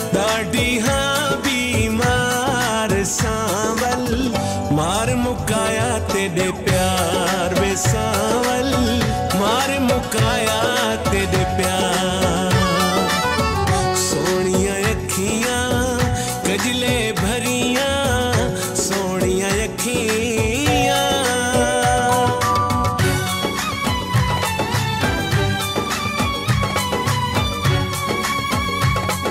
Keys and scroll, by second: 4.5 BackSpace, 6.9 BackSpace, 9.4 ctrl+s, 21.0 ctrl+a.